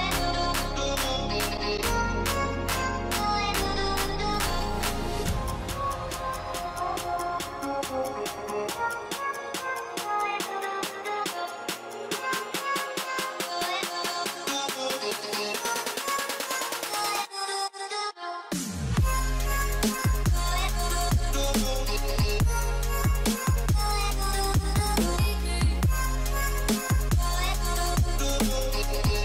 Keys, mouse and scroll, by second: 1.1 click, 5.6 typing, 10.0 typing, 11.8-13.3 typing, 13.6 alt+scroll up 1, 18.0 scroll up 1, 18.6 typing, 23.5 double click, 24.1-25.5 scroll up 1, 26.6 alt+scroll down 1, 27.2 alt+scroll up 1, 28.3 alt+scroll up 1, 28.7 typing, 29.0 scroll, 29.0 scroll up 1.